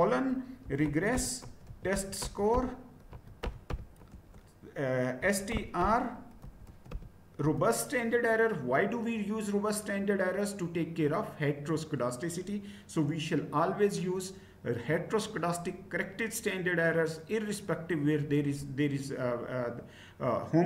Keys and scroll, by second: 0.0-7.4 typing, 7.5 Return.